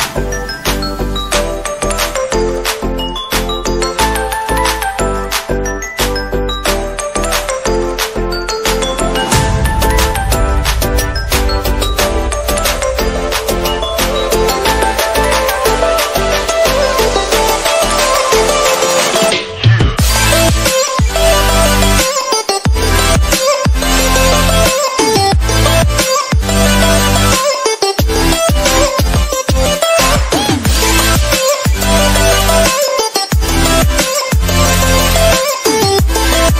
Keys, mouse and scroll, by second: 1.2 space, 1.4 click, 2.1 space, 2.2 click, 3.1 alt+click, 3.7-4.6 typing, 4.8-6.6 drag, 7.0 ctrl+z, 7.1 click, 7.7 click, 8.8 space, 9.0 click, 9.2-10.9 drag, 10.9 space, 10.9 click, 13.1-13.6 typing, 15.7 ], 15.9-17.3 drag, 17.3 space, 17.4 click, 17.4 space, 17.5 click, 17.7 space, 19.5 space, 19.7 click, 20.2 ctrl+click, 21.8 ], 21.9 click, 21.9 space, 22.2 space, 22.2 alt+click, 23.2 [, 23.4 click, 26.1-27.3 drag, 27.3-31.7 typing, 27.3 click, 28.2 click, 29.3 click, 30.3 click, 30.7 click, 31.0 alt+click, 31.5 click, 31.8-35.3 drag, 35.3-36.5 drag.